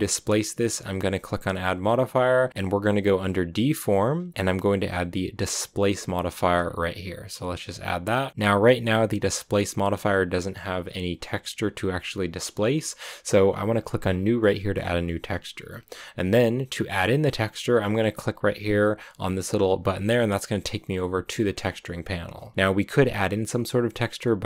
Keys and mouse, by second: 1.3-6.7 drag, 19.9-21.6 drag.